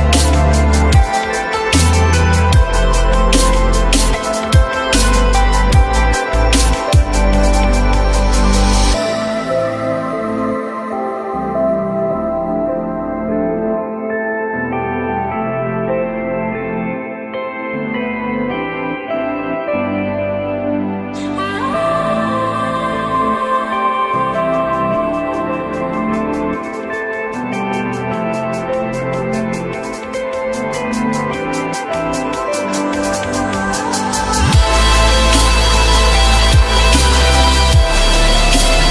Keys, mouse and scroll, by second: 3.8 ctrl+z, 7.6 ctrl+z, 13.7 F3, 14.6 alt+middle click, 17.4 z, 24.2 s, 29.5 alt+middle click, 31.5 alt+middle click, 31.9 alt+middle click.